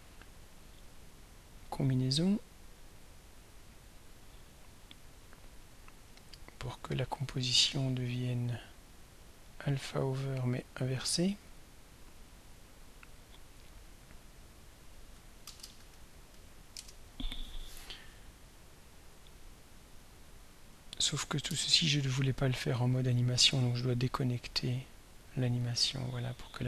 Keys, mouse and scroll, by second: 2.7 click, 3.7 click, 5.4 click, 6.2 click, 6.8 click, 7.5-8.5 scroll down 2, 9.4 click, 10.9 click, 11.6 click, 14.1 click, 14.9 click, 15.3-16.8 typing, 18.8 click, 20.4 click, 23.6 right click, 25.7 click.